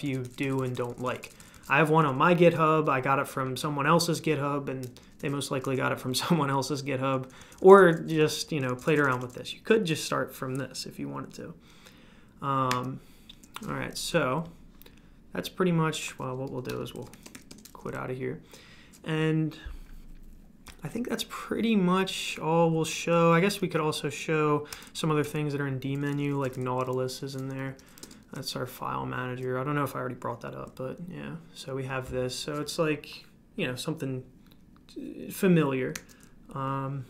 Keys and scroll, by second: 0.0-0.4 typing, 4.9-7.6 typing, 12.7 super+q, 12.7 typing, 16.5 Escape, 16.6 Escape, 16.7-17.8 typing, 23.6 super+q, 24.7 super+d, 26.1-27.6 typing, 28.0 Return, 35.9 super+q.